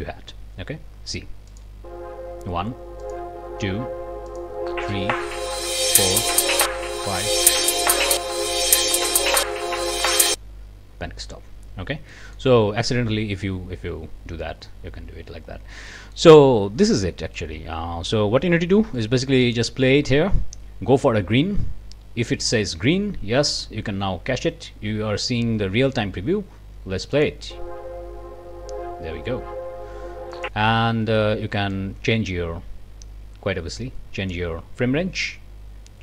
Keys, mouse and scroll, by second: 1.5 click, 3.0 click, 4.3 click, 5.7 click, 6.8 click, 10.2 click, 12.1 click, 12.3-12.6 scroll up 1, 15.9 click, 16.8 click, 17.2 click, 18.3 middle click, 18.3 scroll up 2, 19.4 click, 27.1 click, 30.3 click, 31.7-34.5 ctrl+drag.